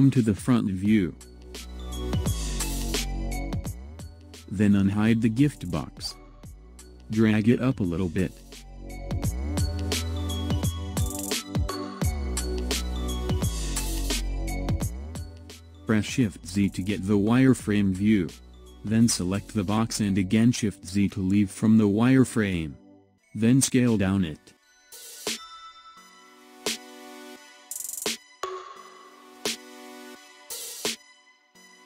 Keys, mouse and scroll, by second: 1.1-1.8 shift+middle drag, 1.8-2.5 scroll up 1, 2.5-5.2 shift+middle drag, 5.2 click, 6.9 click, 8.7 click, 14.1 click, 14.8-15.9 scroll down 1, 17.4 shift+z, 18.5 drag, 20.7 shift+z, 22.5 s.